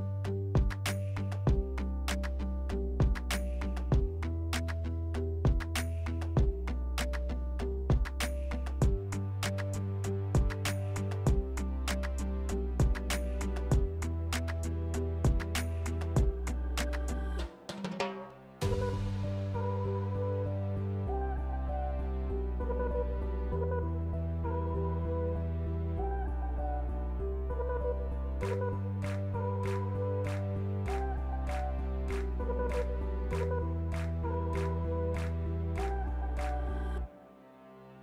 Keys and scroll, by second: 0.6 2, 2.8 2, 3.3 s, 7.1 s, 11.6 s, 24.3 s, 24.8 s, 25.6 s, 36.8 s.